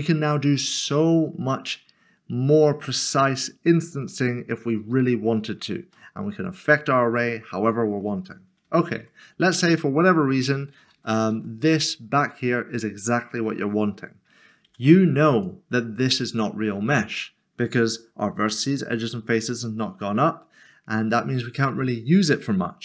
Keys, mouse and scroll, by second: 0.5 scroll up 1, 1.2 scroll down 1, 5.9 middle click, 8.6 middle click, 8.9 ctrl+z, 11.7 ctrl+z, 14.6 ctrl+z, 15.3 click, 16.8 scroll up 1.